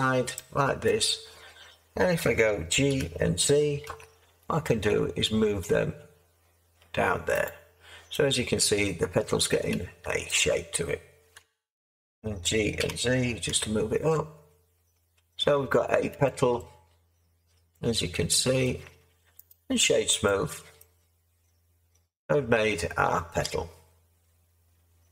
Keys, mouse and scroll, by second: 2.9 g, 3.8 z, 11.3 Tab, 12.7 g, 13.4 z.